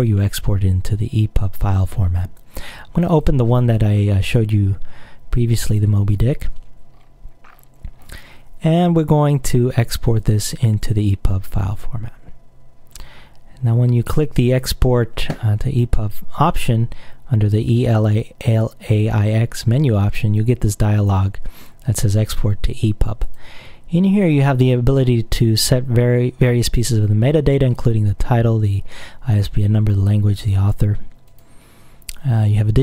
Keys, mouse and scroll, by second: 3.2 click, 5.8 click, 7.0-8.5 scroll up 2, 8.5 scroll up 1, 10.2 click, 11.4 click, 14.1 click, 23.3 click, 31.4 click.